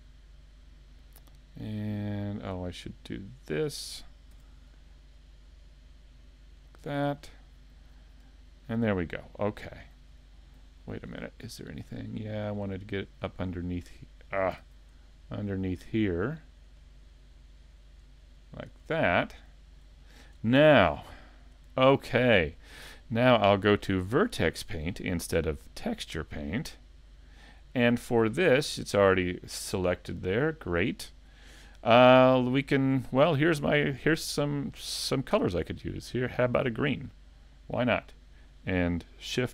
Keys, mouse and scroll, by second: 2.2 shift+middle click, 2.6 middle click, 3.7 scroll up 1, 4.4 c, 6.8 right click, 7.2-7.5 scroll down 2, 7.6 middle click, 10.1 scroll up 3, 10.7 shift+middle click, 11.2 scroll up 2, 11.5 shift+middle click, 12.1 middle click, 12.8 shift+middle click, 13.7 right click, 14.6 super+z, 15.4 shift+right click, 18.9-19.5 scroll down 4, 19.3 middle click, 20.0 shift+middle click, 20.5 middle click, 21.8 shift+middle click, 22.3 middle click, 23.6 click, 28.0 middle click, 31.0 shift+middle click, 36.5 click, 38.1 middle click.